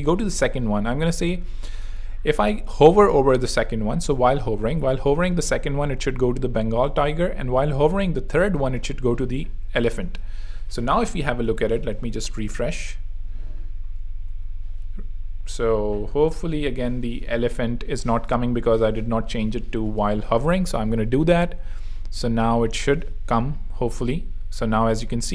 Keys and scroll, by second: 10.2 super+3, 10.8 super+r, 14.2 r, 16.9 super+2, 20.6 super+3, 20.8 super+r, 21.7 r.